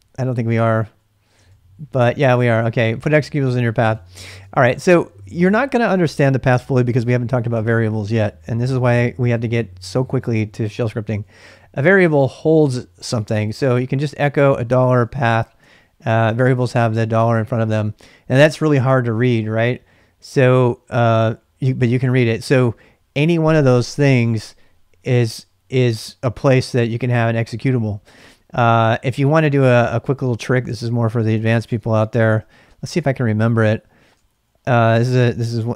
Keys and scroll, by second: 0.0-3.2 typing, 3.9 ctrl+[, 4.0 ctrl+j, 4.5 shift+z, 4.7 shift+z, 13.0-15.8 typing, 29.3-34.2 typing.